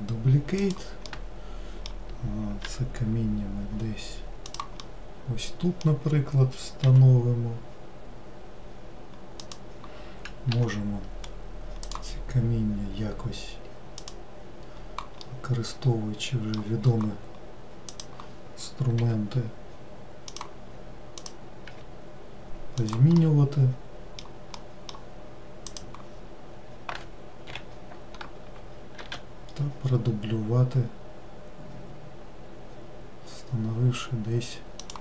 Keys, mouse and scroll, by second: 1.5-3.1 middle drag, 3.1 g, 5.2-7.3 middle drag, 7.3 g, 11.6-12.2 scroll up 1, 12.2 click, 14.4 click, 15.6-18.3 middle drag, 18.3 click, 19.4 g, 21.6 click, 23.6-26.1 middle drag, 26.1 click, 30.2 shift+d.